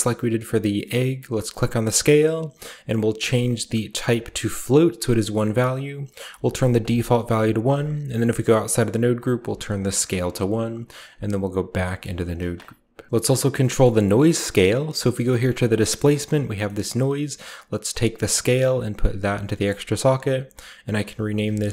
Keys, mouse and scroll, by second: 1.1 click, 3.0 click, 4.5 click, 5.8 click, 6.1 1, 6.6 click, 7.2 scroll up 1, 7.5 Tab, 8.0 scroll up 1, 9.1 click, 9.2 1, 9.6 click, 10.0 click, 10.9 Tab, 11.4 scroll down 1, 12.1 click, 13.1 right click, 13.1-13.5 typing, 13.5-15.0 scroll down 1, 13.7 middle click, 14.0 middle click, 14.5 middle click, 15.0 middle click, 15.5 click, 17.7-19.5 drag, 20.0 click, 20.1 click, 20.6 click, 20.6-21.7 typing.